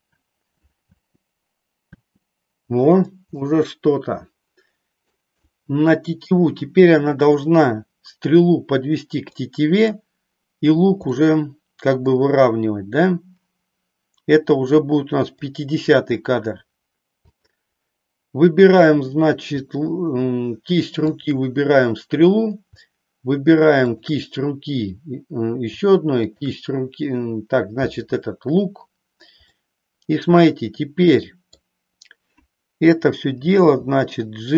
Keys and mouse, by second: 0.9 space, 2.0 space, 3.3-5.1 middle drag, 5.5-6.6 middle drag, 7.0 middle click, 9.3 middle click, 11.1-12.1 middle drag, 15.2 click, 17.3 click, 21.1 shift+click, 29.5-31.5 middle drag, 33.3 g.